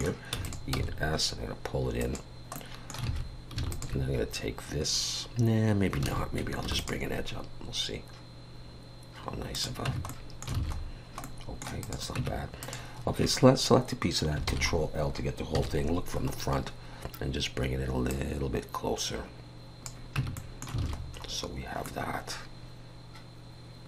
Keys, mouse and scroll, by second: 0.4 e, 0.7 s, 2.5 middle click, 3.1 alt+a, 3.7 alt+shift+click, 6.0 alt+a, 6.6 ctrl+r, 9.9 Tab, 10.1 middle click, 10.6 alt+a, 10.8-11.2 scroll down 1, 11.2 middle click, 11.8 click, 12.2 Tab, 12.6 click, 14.5 ctrl+l, 15.5 KP_1, 16.3-17.6 scroll up 3, 18.1 click, 20.2 Tab, 20.4 middle click, 20.8 alt+a, 21.0-21.9 scroll down 5, 21.9 middle click.